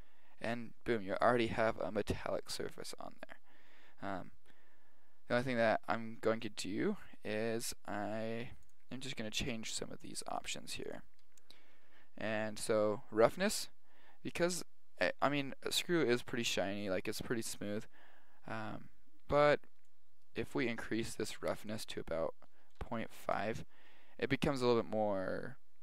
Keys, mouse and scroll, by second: 5.9-8.6 middle drag, 19.9 click, 23.4 click.